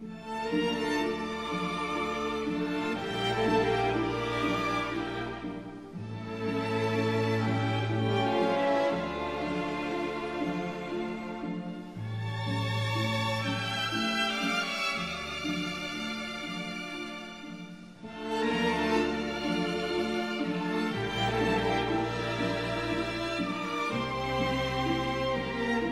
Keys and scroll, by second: 3.7 ctrl+alt+z, 6.2 ctrl+z, 7.2 ctrl+z, 14.3 ctrl+z, 23.0 ctrl+z, 23.7 ctrl+z.